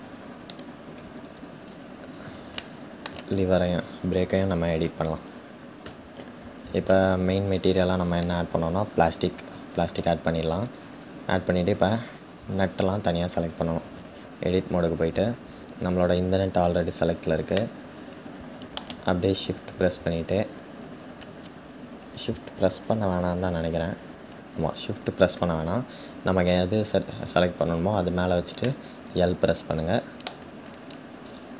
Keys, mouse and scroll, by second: 0.1 `, 1.2-2.2 scroll up 2, 2.2-4.8 shift+middle drag, 4.8 Tab, 5.7 Tab, 9.9-14.0 drag, 14.0 Tab, 14.9-17.4 scroll up 2, 17.4-22.2 shift+middle drag, 22.2 l, 23.1-28.4 scroll down 4, 28.4-30.8 middle drag, 30.8-31.5 scroll up 4.